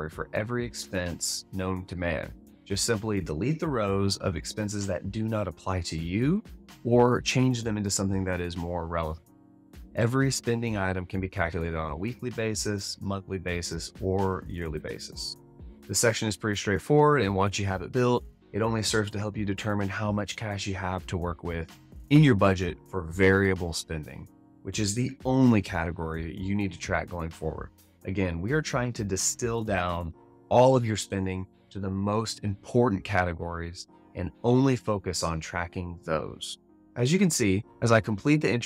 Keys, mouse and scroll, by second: 36.8 alt+a.